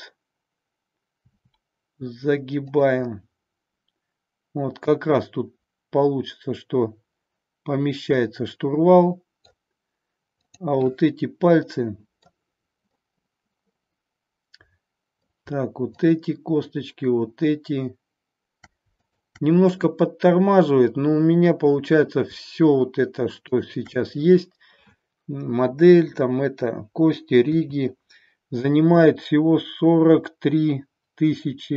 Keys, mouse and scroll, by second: 1.4 r, 3.1-9.5 middle drag, 10.5-13.0 drag, 13.1-15.2 middle drag, 16.0-18.2 shift+drag, 19.1-21.5 shift+drag, 27.5 KP_7.